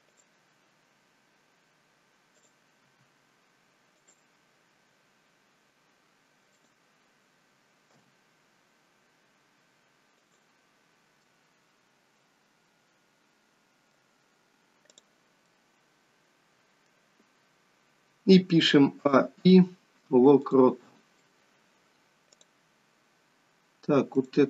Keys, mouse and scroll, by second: 2.2 click, 2.8 r, 6.5 click, 7.9 g, 11.1 middle click, 14.9 click, 15.4 middle click, 19.0 a, 19.3 i, 21.1 middle click, 22.2 click, 24.1 click.